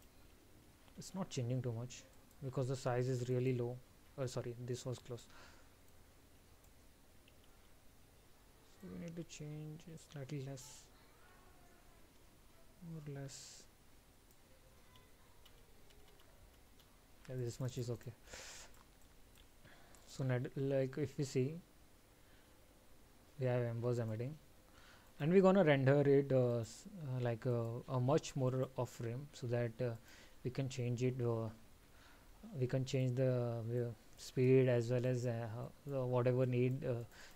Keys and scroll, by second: 0.7 ctrl+z, 2.2 alt+?, 7.7 ctrl+z.